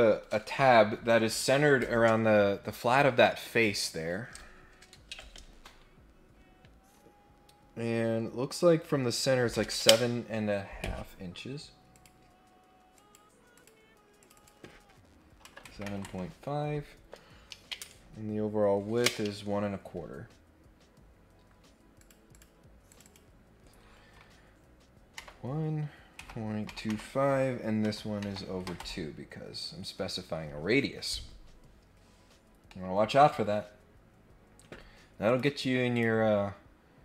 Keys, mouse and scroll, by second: 11.9 click, 12.9 click, 13.5 click, 14.1 click, 14.3 click, 20.4-20.9 scroll down 2, 21.0 scroll up 1, 21.9 click, 22.3 click, 22.9 click, 32.2-32.7 scroll down 2, 32.7 middle click, 32.7 scroll up 1, 33.2 middle click, 33.5 scroll up 1, 33.7 scroll down 1, 34.1 scroll up 1, 35.2 click, 35.9 click.